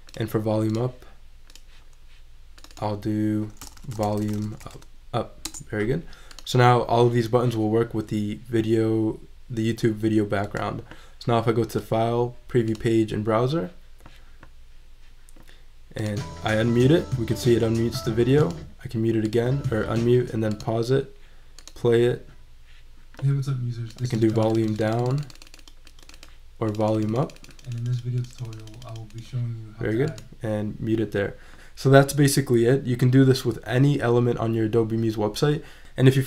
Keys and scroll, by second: 3.4-5.1 typing.